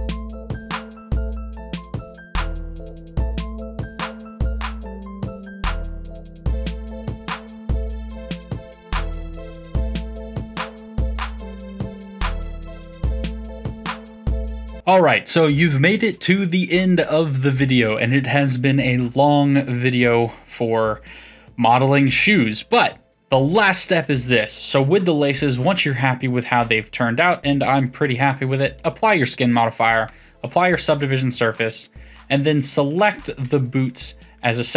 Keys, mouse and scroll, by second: 0.1-0.5 middle drag, 0.5 c, 1.5 middle click, 1.8 ctrl+a, 2.1 middle click, 2.3 r, 2.5 middle click, 2.7 g, 3.1 middle click, 3.5 Tab, 3.6 middle click, 3.9 click, 4.1-5.1 middle drag, 5.1 Tab, 5.4 click, 5.8 shift+click, 6.0-11.8 typing, 6.5 click, 7.0 click, 7.6 click, 8.2 click, 8.3 shift+click, 9.1 shift+click, 10.3 click, 10.9 click, 11.6 click, 12.4-12.9 middle drag, 12.9 Tab, 13.2 click, 13.4 middle click, 14.7 click, 25.2-28.2 middle drag, 28.8-33.0 drag, 34.3-34.7 middle drag.